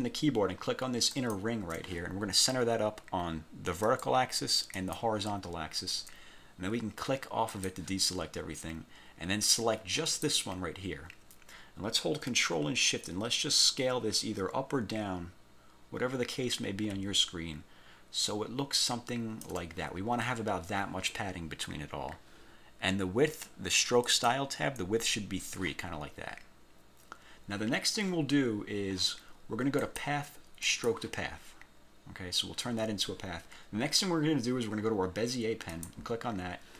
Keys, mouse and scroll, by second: 1.3 shift+click, 3.9 click, 4.9 click, 5.5 scroll up 1, 7.6 click, 10.2 click, 13.1 ctrl+shift+click, 24.2 click, 29.9 click, 30.8 click, 35.9 click.